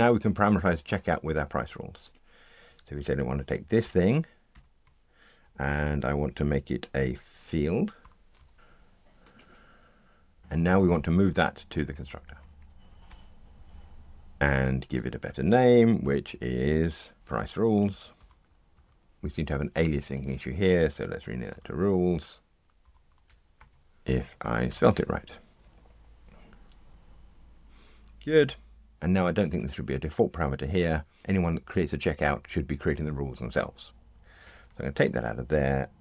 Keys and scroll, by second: 3.2 alt+Up, 4.5 alt+Down, 8.0 alt+super+f, 10.9 alt+Return, 16.0 shift+F6, 25.5 ctrl+r.